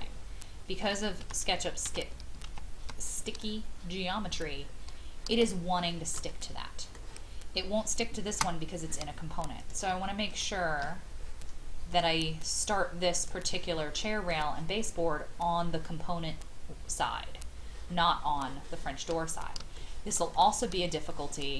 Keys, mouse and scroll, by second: 1.2 ctrl+z, 1.8 ctrl+z, 2.4 ctrl+z, 3.3-4.1 scroll down 1, 5.5 shift+middle click, 7.7-8.3 scroll up 1, 9.6 click, 10.3 shift+click, 11.9-14.2 drag, 17.3-19.6 scroll down 1, 19.7 shift+middle click, 20.3 middle click, 20.7 scroll down 1, 21.1 shift+middle click.